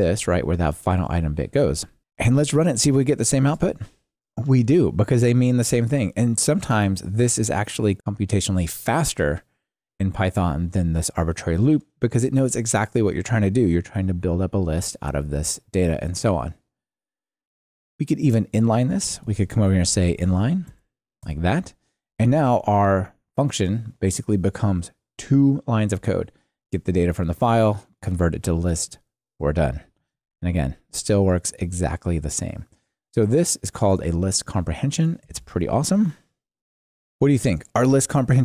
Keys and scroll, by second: 2.0 Escape, 3.4 ctrl+r, 19.2 ctrl+alt+shift+t, 20.7 alt+super+n, 30.1 ctrl+r, 35.5 Tab, 36.5 super+v.